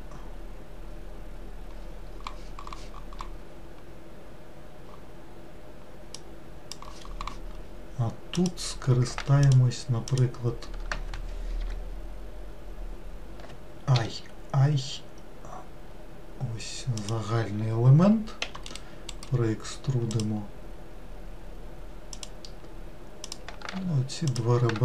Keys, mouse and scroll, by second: 8.4 click, 9.5 shift+click, 10.1 shift+click, 18.5 e, 19.2-22.2 right drag, 23.3 click, 24.3 shift+click.